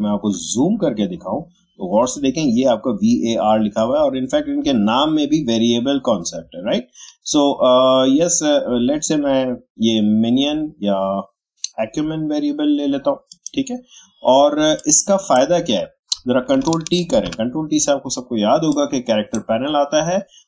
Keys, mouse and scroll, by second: 0.4 shift+scroll up 1, 7.1 shift+scroll down 1, 13.3-17.1 drag, 17.1 ctrl+t, 18.7-20.4 drag.